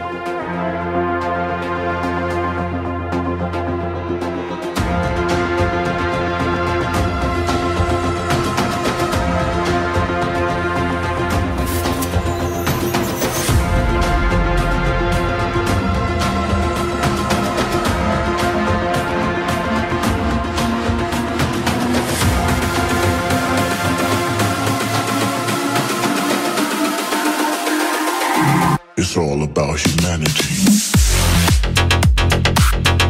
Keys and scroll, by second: 7.8 ctrl+t, 8.7 ctrl+z, 10.3 ctrl+z.